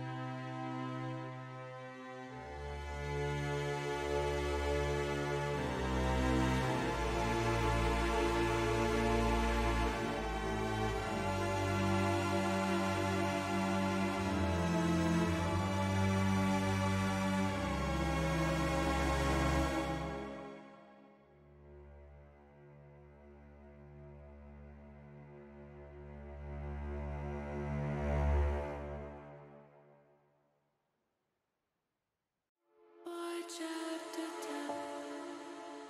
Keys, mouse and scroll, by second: 0.2 Tab, 1.1 ctrl+r, 3.7 click, 5.0 ctrl+r, 6.6 click, 7.6 click, 8.9 click, 9.9 Tab, 10.5 middle click, 12.5 shift+click, 13.1 shift+click, 17.0 click, 18.6 ctrl+z, 23.6 click, 24.4 click, 25.4 click, 27.1 click, 28.0 click, 29.2 click, 30.6 middle click, 31.1 shift+middle click, 32.4 shift+middle click, 34.7 Tab.